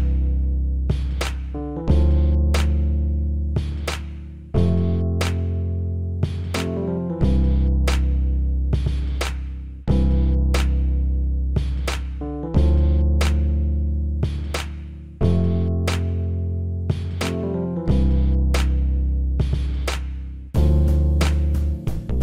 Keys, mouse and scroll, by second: 8.3-9.9 drag, 18.8 click, 19.9 click, 20.6-22.2 middle drag.